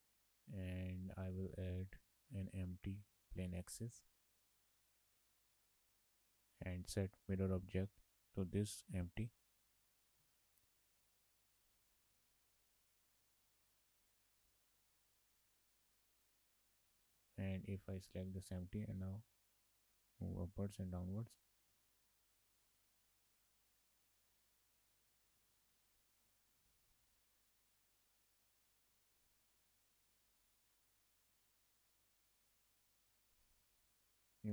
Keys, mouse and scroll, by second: 1.0 shift+a, 5.3 click, 7.5 click, 11.3 click, 11.7 click, 15.1 click, 15.5 click, 17.3 click, 20.0 click, 24.2-25.0 scroll up 2, 25.0 shift+middle click, 25.6-26.9 scroll down 1, 26.9 Tab, 28.7 click, 30.2 click, 34.3-34.5 scroll up 1.